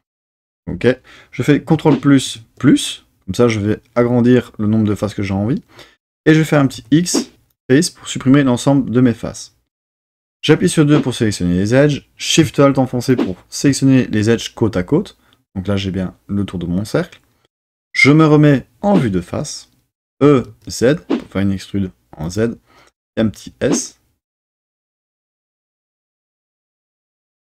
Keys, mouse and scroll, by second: 1.7 super+KP_Add, 2.3 super+KP_Add, 6.7 x, 10.5 2, 13.1 alt+shift+click, 18.4 KP_1, 20.1 e, 20.5 z, 22.2 click, 23.2 s, 25.8 click, 26.2 shift+middle click.